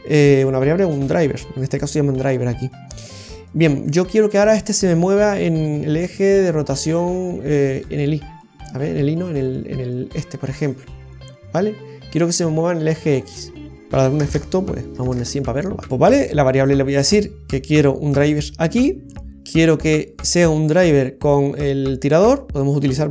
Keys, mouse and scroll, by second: 7.7 click, 9.3 click, 13.3 click, 14.9 click, 15.0 KP_0, 16.1 right click.